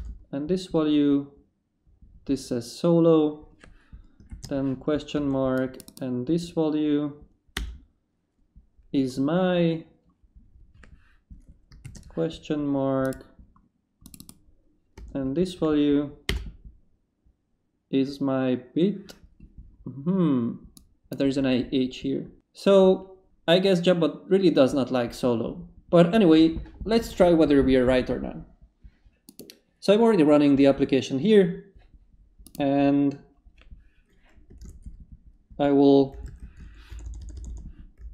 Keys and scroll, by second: 4.3 shift+/, 5.2 shift+space, 7.5 Return, 11.8 shift+/, 15.0 space, 16.3 Return, 34.6 ctrl+c, 35.9-38.1 typing.